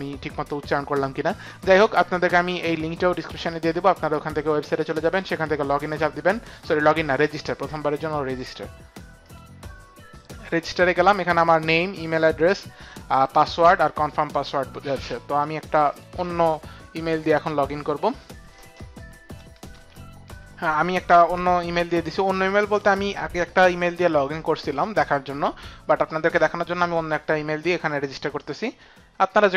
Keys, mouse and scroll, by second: 5.7 click, 6.4 click, 9.2 click, 15.8 click, 28.4 click.